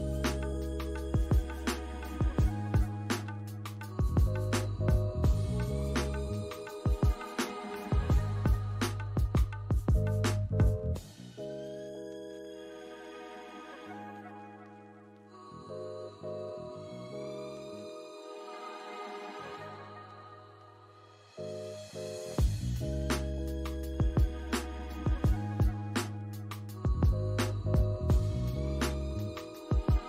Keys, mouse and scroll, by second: 0.4 alt+click, 0.9 right click, 2.8 alt+click, 3.9 scroll up 1, 4.4 alt+click, 5.6 ctrl+click, 12.9 scroll down 1, 13.6 alt+click, 14.2 alt+middle click, 16.2 double click, 16.7 alt+click, 17.6 shift+double click, 18.4 shift+click, 19.0 alt+middle click, 19.1 alt+click, 19.2 shift+click, 19.2 shift+double click, 19.3 shift+click, 19.8 shift+click, 20.1 ctrl+z, 20.2 ctrl+z, 20.5 shift+click, 21.7 scroll down 1, 21.9 alt+click, 23.2 alt+middle click, 23.5 alt+click, 25.5 scroll up 1, 25.9 alt+click, 27.4 ctrl+click, 28.4 alt+click, 29.8 scroll up 1.